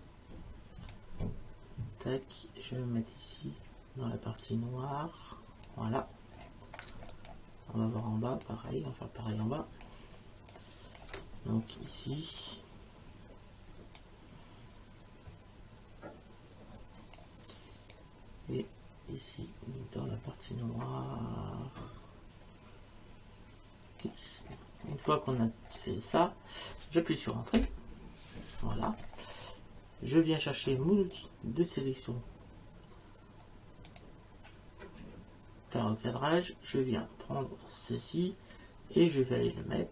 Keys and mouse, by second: 0.9 click, 6.9 space, 7.1 click, 8.2 click, 9.3 click, 10.5 click, 14.0 click, 17.9 click, 27.6 Return, 27.6 KP_Enter, 31.1 click, 33.9 click, 36.2 click.